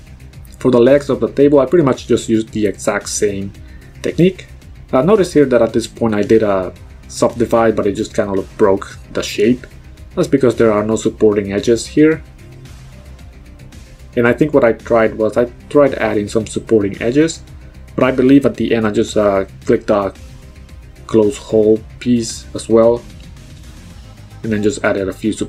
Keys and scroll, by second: 3.5 ctrl+z, 10.7 b, 11.2 z.